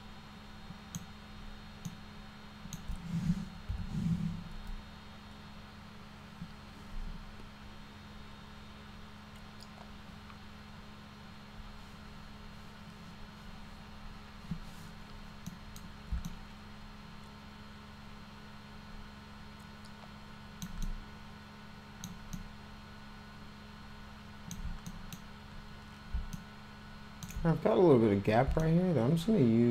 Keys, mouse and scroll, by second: 1.9 alt+middle click, 3.6 p, 15.5 middle click, 16.3-20.7 alt+middle drag, 20.8-22.1 alt+middle drag, 22.4-24.6 alt+middle drag, 24.9 middle click, 26.4 alt+middle click, 28.6-29.7 alt+middle drag.